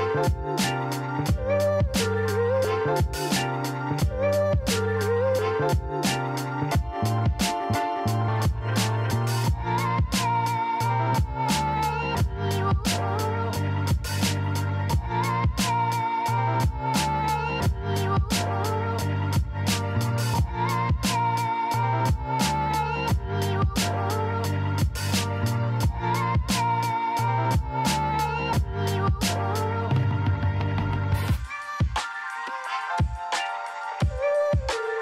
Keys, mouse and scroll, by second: 0.9 KP_0, 1.2 KP_1, 1.4 Return, 2.4 click, 4.2 KP_0, 4.5 KP_2, 4.7 Return, 13.8 click, 15.8 KP_0, 16.0 KP_3, 16.3 Return, 19.7 click, 21.1 click, 22.6 KP_0, 23.0 KP_1, 23.2 Return, 23.8 click, 25.6 KP_0, 26.1 KP_4, 26.4 Return, 27.3 click, 28.6 KP_0, 28.9 KP_3, 29.2 Return, 30.3 click, 31.6 KP_0, 31.8 KP_2, 32.1 Return, 34.1 click.